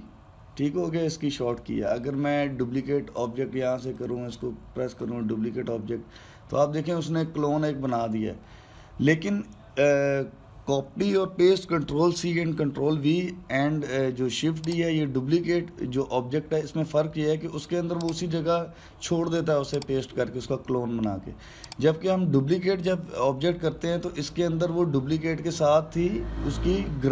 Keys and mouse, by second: 4.7-7.8 drag.